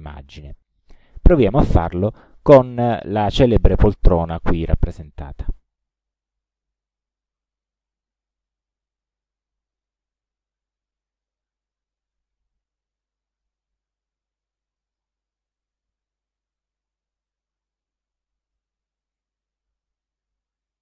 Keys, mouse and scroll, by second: 7.5 click, 9.6 click, 11.2 click, 12.0-13.7 ctrl+drag, 15.0 ctrl+click, 15.9-17.9 ctrl+drag, 18.9-20.8 ctrl+drag.